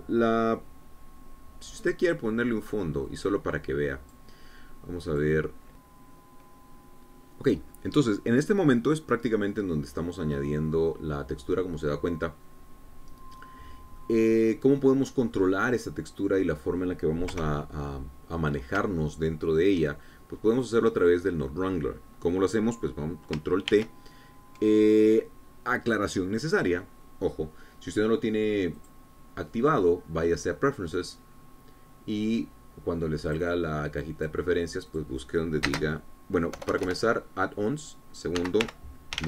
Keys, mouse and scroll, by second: 4.3-5.5 drag, 6.7 click, 15.0-15.3 scroll down 1, 15.5-16.5 middle drag, 16.6 scroll down 1, 16.8-18.5 middle drag, 18.8 KP_0, 19.8 scroll up 1, 20.4 shift+middle click, 22.1 click, 22.5 click, 25.2 ctrl+t, 30.3 click, 32.2 click, 34.8-36.0 drag, 36.4 click, 37.2 space, 38.1 BackSpace.